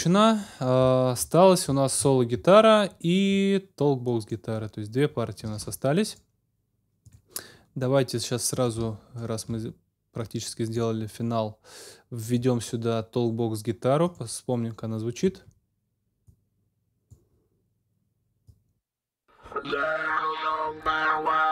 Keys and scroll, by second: 5.5 super+s, 15.2 space.